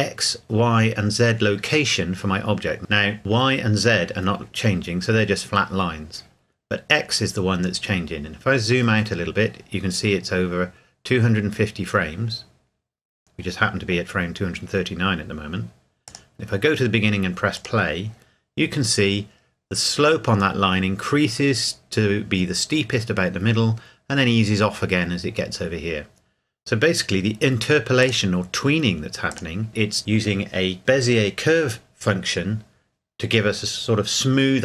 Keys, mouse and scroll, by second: 8.0-9.9 scroll down 1, 16.1 click, 28.0 click.